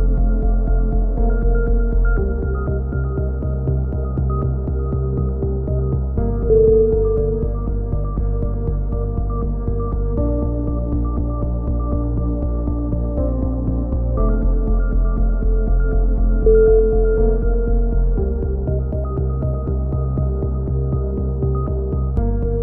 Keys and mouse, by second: 0.8 a, 1.0 a, 1.5 k, 2.9 a, 3.1 a, 5.0 k, 6.6 a, 6.7 a, 7.7 k, 9.3-9.9 drag, 10.9 k, 12.6 a, 12.9 a, 13.0 k, 14.7 a, 14.8 a, 15.2 k, 17.3 a, 17.6 Tab, 18.4 Tab, 18.7 a, 19.5-20.8 drag, 20.8 ctrl+r, 21.6 ctrl+z, 22.3 ctrl+r.